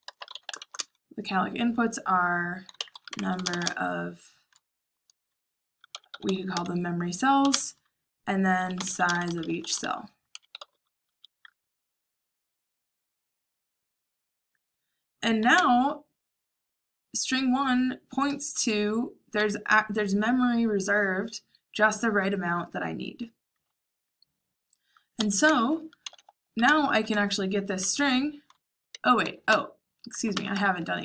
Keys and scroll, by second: 0.0-1.0 typing, 2.5-4.1 typing, 5.6-11.1 typing, 15.5 j, 25.1 Escape, 25.4-27.0 typing, 28.6-31.0 typing.